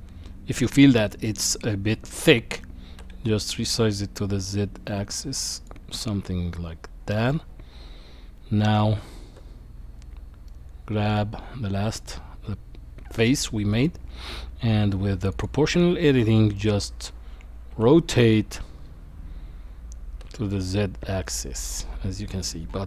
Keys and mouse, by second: 2.9 s, 6.0-7.3 middle drag, 9.4 Tab, 10.5 middle click, 13.4 middle click, 15.3 click, 16.6 middle click, 17.7 r.